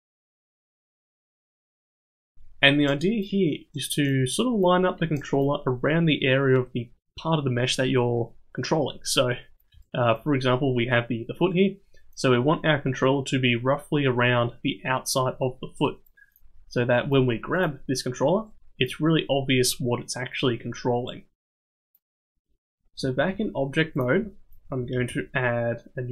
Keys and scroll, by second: 23.2 ctrl+Tab, 24.9 shift+a.